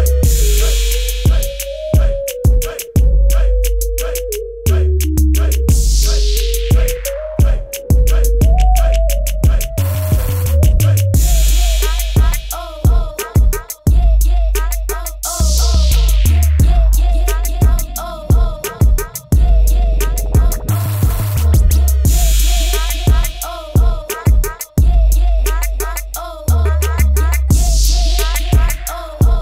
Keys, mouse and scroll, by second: 14.3 click, 16.3 typing, 16.9 click, 18.2 click, 21.5 v, 23.7-24.1 scroll up 1, 24.4 ctrl+-, 24.6 click.